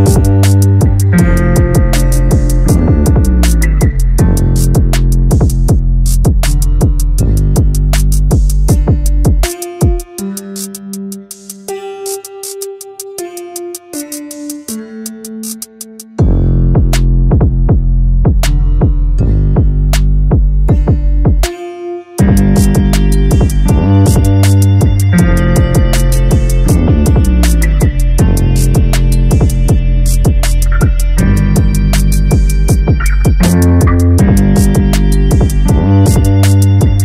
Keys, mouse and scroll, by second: 3.0-5.0 middle drag, 5.0-6.3 drag, 6.3-7.8 middle drag, 7.8 click, 12.6-12.9 scroll down 2, 12.9 a, 13.1 a, 13.8-14.4 scroll up 1, 14.4 click, 16.0-16.5 drag, 16.5-17.1 scroll up 1, 17.1 click, 22.5-25.1 drag, 26.1-27.1 drag, 35.3-37.0 drag.